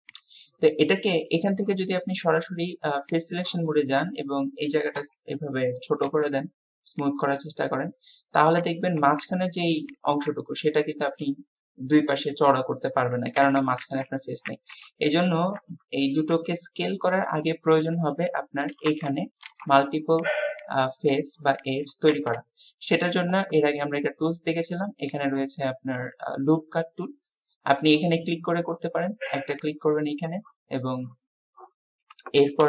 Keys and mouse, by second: 1.0 middle click, 5.0 KP_3, 6.1 s, 8.0 click, 10.5 click, 13.5 ctrl+z, 15.6 KP_3, 19.0 2, 27.1 click, 29.7-32.6 drag.